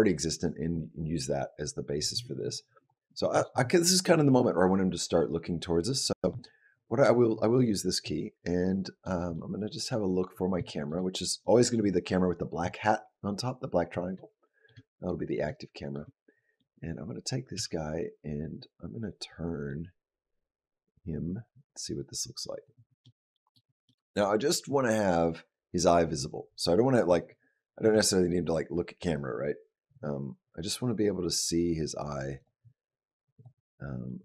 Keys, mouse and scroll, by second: 8.2 middle click, 9.2 middle click, 9.9-10.4 scroll up 3, 10.5 shift+middle click, 11.2 middle click, 14.3 shift+middle click, 14.6 middle click, 15.6 shift+middle click, 16.0 middle click, 17.7 g, 22.9 middle click, 23.7 middle click, 27.7 g, 33.2 click, 33.9 middle click.